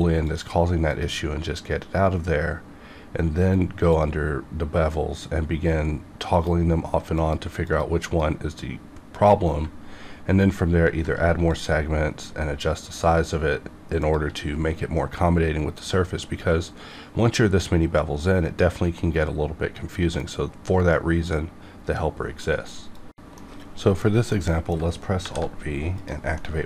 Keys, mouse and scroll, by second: 3.9 click, 5.1 click, 6.3 click, 9.9-11.2 ctrl+scroll up 3, 11.5-16.9 shift+drag, 24.3 middle click, 25.2 alt+v, 25.9 click, 26.3 middle click, 26.4 middle click.